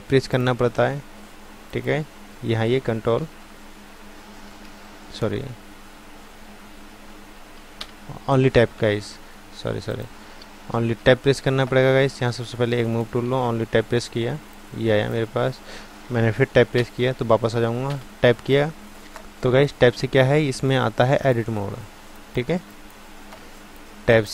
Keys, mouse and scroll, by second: 2.3 ctrl+Tab, 3.2 ctrl+Tab, 5.3 shift+Tab, 6.5 ctrl+Tab, 7.3 ctrl+Tab, 7.8 Tab, 8.8 ctrl+Tab, 9.9 click, 10.8 ctrl+z, 12.8-16.8 drag, 16.8 Tab, 17.9 Tab.